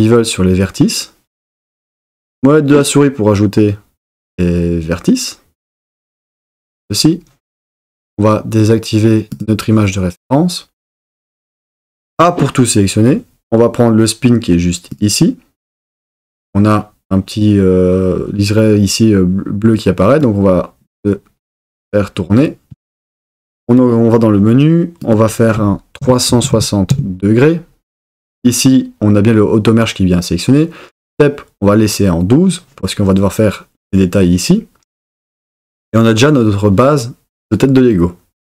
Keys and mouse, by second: 6.3 click, 9.3 click, 12.1 a, 23.7 click, 25.1-26.9 drag.